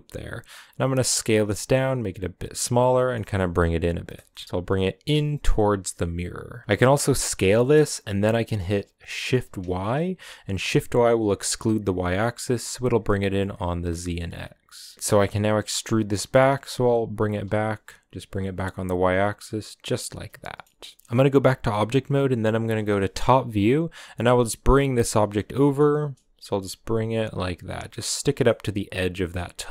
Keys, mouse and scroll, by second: 2.7 g, 4.0 g, 4.4 g, 6.6 KP_0, 6.8 s, 14.9-15.5 scroll up 1, 15.5 e, 19.9 scroll down 2, 20.1 shift+middle click, 20.5 scroll up 1, 20.7 shift+middle click, 21.0 Tab, 21.2 Tab, 22.4 KP_7, 23.1-23.9 scroll up 3, 23.9 g, 25.6 g, 28.2-29.7 middle drag.